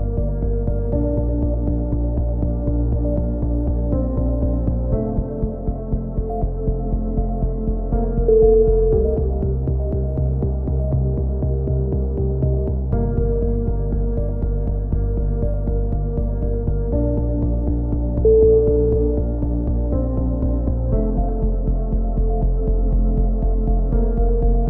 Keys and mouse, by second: 0.0 right click, 0.5 f, 0.6 a, 1.1 click, 1.1-3.5 right drag, 1.3 click, 2.4 f, 2.4 a, 3.0 f, 3.3 click, 3.7 right click, 4.2 a, 4.5-6.4 drag, 6.0 right click, 6.2 a, 6.5-7.8 right drag, 7.8 x, 8.4 click, 8.8 right click, 9.5 x, 10.8-13.1 drag, 13.1 middle click, 13.9 right click, 13.9 shift+d, 14.1 click, 14.9 click, 16.9 click, 16.9 a, 17.1 c, 17.8 right click, 18.0 z, 18.3 click, 18.7 c, 20.7 right click, 20.9 w, 21.6 a, 21.6 z, 22.2 click, 24.0 right click, 24.5 click, 24.5 z, 24.5 c.